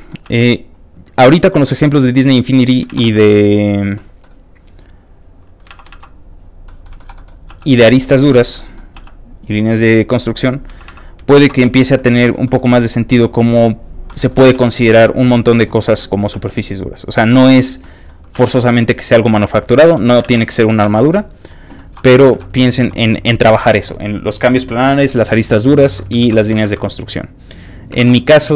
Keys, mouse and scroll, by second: 0.3 f, 0.3 click, 0.6 click, 1.2 ctrl+z, 1.5 ctrl+click, 2.2 click, 2.9 ctrl+z, 3.1 ctrl+click, 3.3 ctrl+click, 3.9 ctrl+middle click, 4.8 click, 5.2 click, 5.7 ctrl+z, 6.3 click, 6.4 z, 6.6 middle click, 7.0 shift+middle click, 7.1 shift+middle click, 7.5 shift+f, 7.6 click, 7.8 click, 8.0 click, 8.3 middle click, 8.6 middle click, 9.0 f, 9.0 click, 9.3 click, 9.6 click, 10.0 click, 10.4 click, 10.8 ctrl+z, 11.7 z, 11.7 ctrl+click, 11.9 ctrl+middle click, 12.2 ctrl+middle click, 12.4 ctrl+middle click, 12.8 f, 12.9 click, 13.1 click, 13.8 click, 14.1 middle click, 14.4 ctrl+z, 14.6 click, 14.8 click, 15.3 middle click, 15.8 middle click, 16.5 click, 16.5 f, 16.7 click, 17.0 click, 17.4 middle click, 17.8 middle click, 18.4 f, 18.4 click, 18.6 click, 19.2 click, 19.7 scroll down 3, 19.9 middle click, 20.0 shift+scroll up 1, 20.3 ctrl+z, 20.4 middle click, 20.9 ctrl+Tab, 21.2 ctrl+shift+middle click, 21.8 ctrl+middle click, 22.1 ctrl+middle click, 22.4 alt+a, 22.5 scroll up 2, 22.6 alt+shift+middle click, 25.8 shift+middle click, 26.2 ctrl+shift+s, 26.7 alt+Tab, 28.0 alt+Tab.